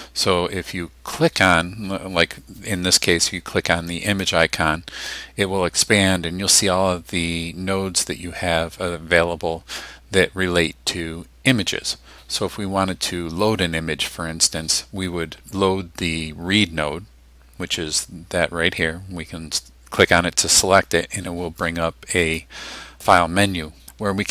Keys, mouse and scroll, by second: 4.1 click, 20.0 click, 21.6 click.